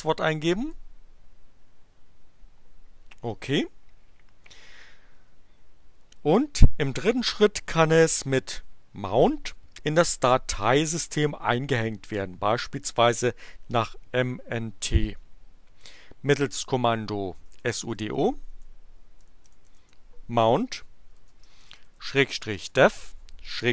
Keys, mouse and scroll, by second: 0.0-0.7 typing, 17.2-23.7 typing.